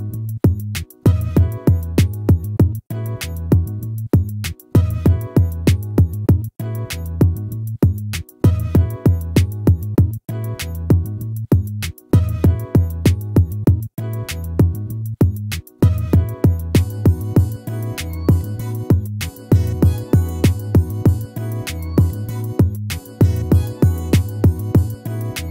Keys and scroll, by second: 8.2 ctrl++, 13.0 ctrl+-.